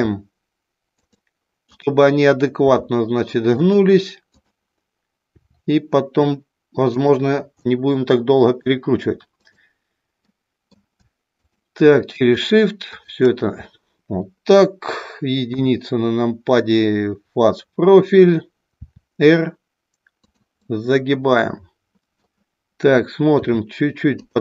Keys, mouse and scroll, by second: 2.6 r, 3.6 click, 4.2 click, 7.0 click, 7.6 middle click, 9.3 click, 10.2 middle click, 11.3 shift+click, 12.9 shift+click, 15.6 KP_1, 18.8 r, 20.6-22.3 middle drag, 23.3 r.